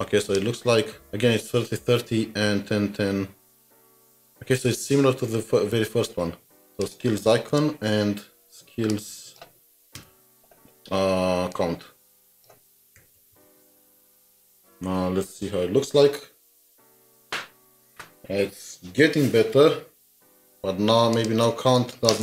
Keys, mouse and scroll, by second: 0.3 double click, 4.5 alt+Tab, 6.2-6.9 scroll up 2, 7.5 alt+shift+Down, 12.8-13.9 typing.